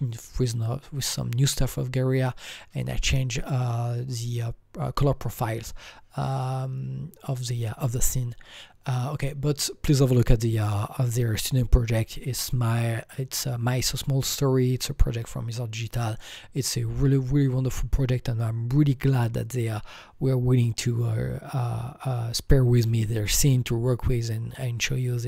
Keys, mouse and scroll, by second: 8.6-10.9 alt+drag, 8.6-10.4 scroll down 1.